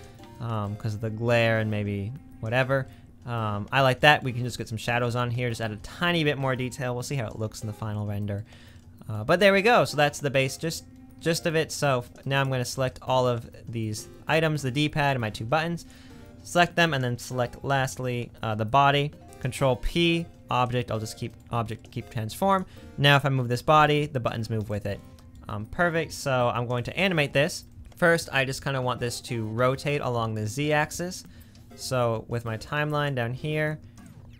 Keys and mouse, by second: 1.7 middle click, 2.7 middle click, 13.5 middle click, 15.7-16.7 shift+drag, 19.4 ctrl+p, 20.3-21.4 middle drag, 21.6 middle click, 23.4 g, 24.3 middle click, 32.8 click, 33.9-34.3 drag.